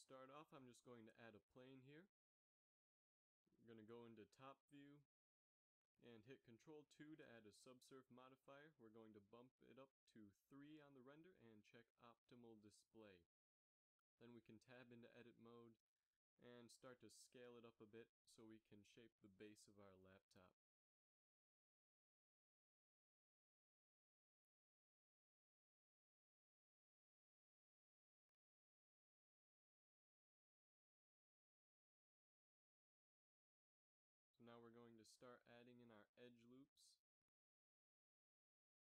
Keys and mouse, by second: 1.3 shift+a, 5.6 KP_7, 7.8 ctrl+2, 15.6 Tab, 17.8 s, 21.6 a, 21.8 b, 22.5 g, 25.9 a, 26.4 b, 27.2 g, 29.1 a, 29.3 b, 31.4 s, 35.5 a, 36.6 z, 37.0 ctrl+r.